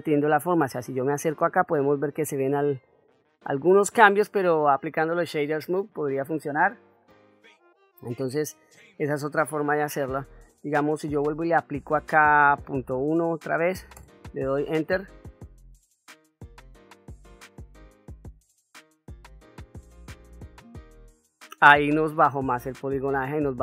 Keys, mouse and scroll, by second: 1.3-2.0 shift+middle drag, 2.3-4.1 ctrl+middle drag, 4.3-4.6 ctrl+middle drag, 5.4 shift+middle drag, 8.2-9.5 drag, 11.4-20.9 drag, 21.6-22.2 middle drag, 22.9 ctrl+middle click.